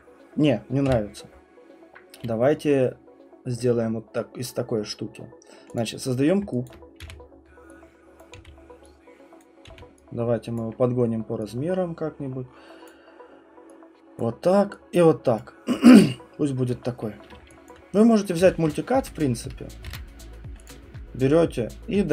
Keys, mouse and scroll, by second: 0.8 Delete, 5.7 click, 6.7 alt+click, 7.0 r, 8.2 click, 8.3 w, 9.4 click, 9.7 r, 10.5 click, 12.9 click, 14.2 click, 15.4 click, 16.7 click, 17.7 alt+click, 18.4 s, 19.0 ctrl+middle click, 19.8 ctrl+z, 20.7 alt+click, 21.4 ctrl+middle click.